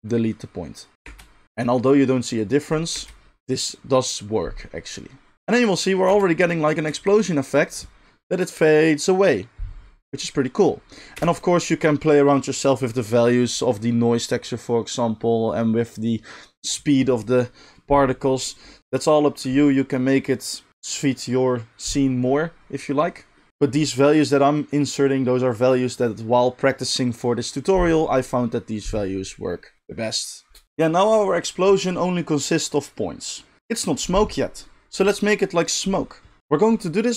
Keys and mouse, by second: 1.0 space, 2.9 space, 6.1 space, 11.1 space, 23.5-30.6 middle drag, 30.6-37.1 drag.